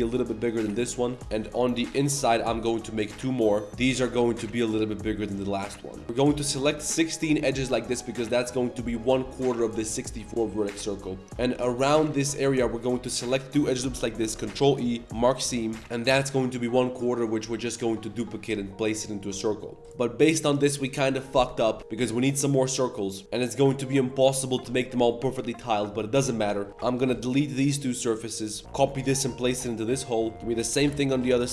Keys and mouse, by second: 0.9 shift+middle drag, 1.4 ctrl+z, 1.8 ctrl+shift+click, 3.0 i, 3.7 g, 3.7 s, 3.9 g, 6.1 2, 6.5 click, 10.2 shift+middle click, 11.6 alt+shift+click, 12.0 c, 14.2 ctrl+e, 19.2 shift+middle click, 26.5 shift+middle click, 26.9 ctrl+shift+click, 27.1 x, 28.6 Tab, 28.6 shift+s, 28.6 shift+d, 28.6 r, 30.3 ctrl+KP_Add, 30.3-31.5 typing.